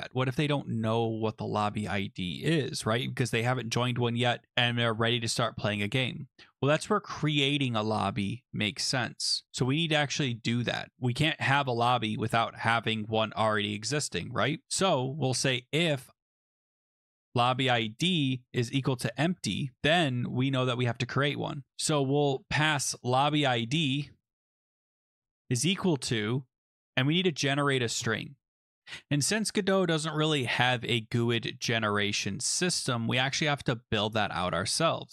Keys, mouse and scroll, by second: 15.0-19.7 typing, 19.8 Right, 19.8 Return, 22.0-23.3 typing, 23.4 Tab, 24.5-25.2 typing, 28.8 click, 28.8 BackSpace, 31.3 BackSpace, 31.8 click, 32.8 click, 35.0 click.